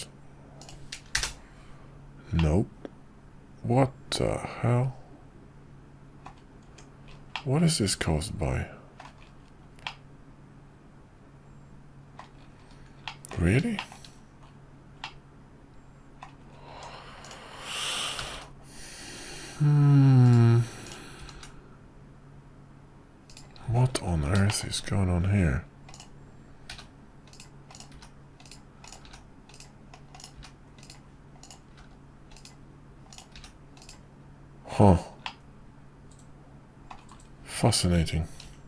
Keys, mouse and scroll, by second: 2.4-6.3 middle drag, 6.6 Tab, 7.3-9.0 middle drag, 9.8-12.2 middle drag, 13.0 middle click, 13.8 shift+middle click, 15.0-16.2 middle drag, 16.7 Tab, 17.3 click, 18.2 g, 24.5 shift+middle click, 25.9 click, 26.8 g, 27.8 click, 28.0 g, 30.4 g, 31.4 click, 31.8 g, 33.1 click, 33.4 g, 35.3-36.9 middle drag, 38.4 ctrl+r.